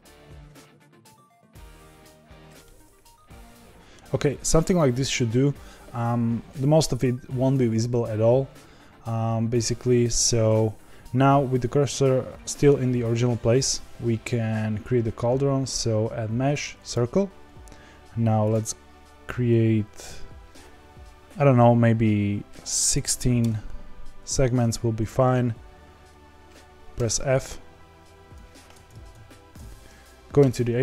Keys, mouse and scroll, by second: 0.3 r, 0.6 g, 1.1 middle click, 1.6 r, 1.9 g, 2.6-4.0 middle drag, 4.0-6.5 scroll down 1, 6.5-7.3 middle drag, 7.3-7.9 scroll down 1, 7.9 scroll down 1, 9.6-16.9 shift+middle drag, 23.4 click, 24.6 Tab, 26.9 f, 28.3 Tab, 28.8 ctrl+z, 29.1 ctrl+z, 29.5 ctrl+z, 30.3 Tab.